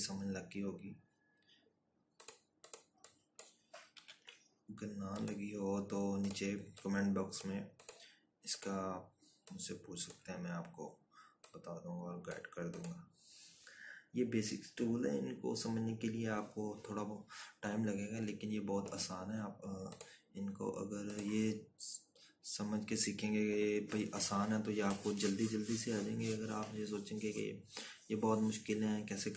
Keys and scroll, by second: 6.7 ctrl+-.